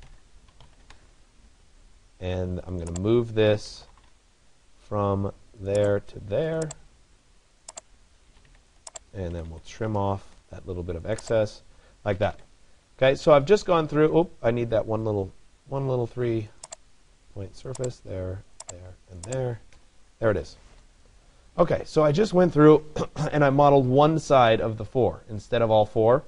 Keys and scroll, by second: 8.0 Escape, 10.0 Return, 19.4 Return.